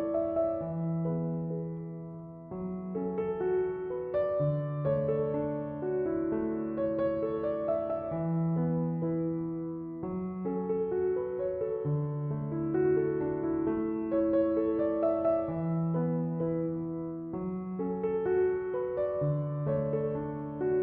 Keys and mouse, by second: 15.4-20.8 drag.